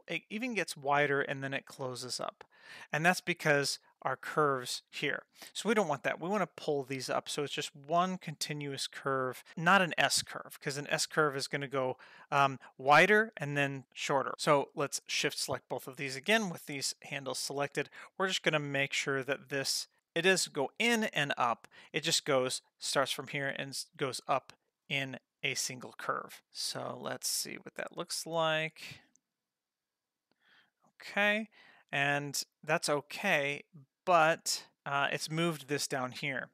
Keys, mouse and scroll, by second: 15.0 shift+click, 17.7 g, 27.0-35.2 drag.